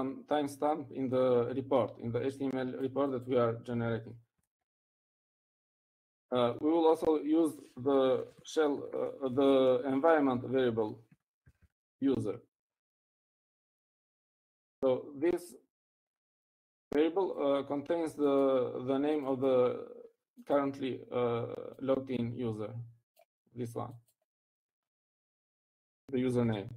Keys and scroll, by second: 9.3-11.2 typing, 12.3-13.5 typing.